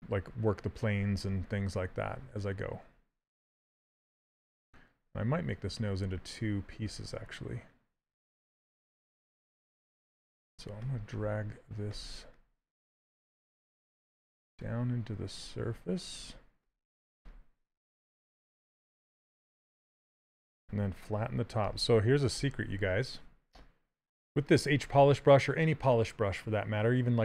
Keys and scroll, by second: 2.6 s, 12.9 s, 18.1 s, 23.2 s.